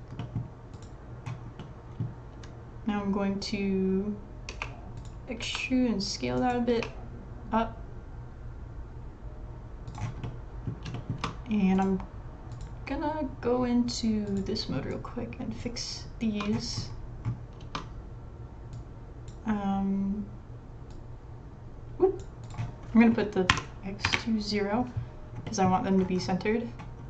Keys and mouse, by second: 0.2 click, 0.7 click, 1.6-2.1 middle drag, 4.5 e, 5.4 s, 6.7 e, 8.8 click, 10.2 middle click, 10.9 shift+middle click, 12.5 middle click, 14.3 click, 15.0 click, 16.2 shift+middle click, 17.6 shift+middle click, 18.7 click, 21.0-22.2 drag, 22.4-25.0 drag, 25.4 middle click.